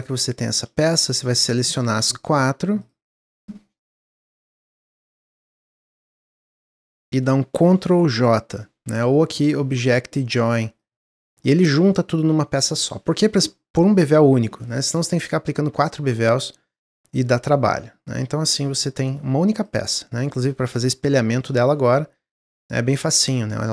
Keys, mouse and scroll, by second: 0.2-3.4 drag, 3.7 shift+click, 4.3 shift+click, 4.7 middle click, 5.2-5.9 scroll down 1, 5.9 shift+click, 6.2 middle click, 6.7 scroll down 2, 7.0-9.3 middle drag, 9.3-12.3 drag, 14.8-18.2 drag, 18.4-19.5 middle drag, 19.5 click, 19.9 scroll down 1, 20.2-22.3 middle drag, 22.3 click, 22.6 x, 23.5 click.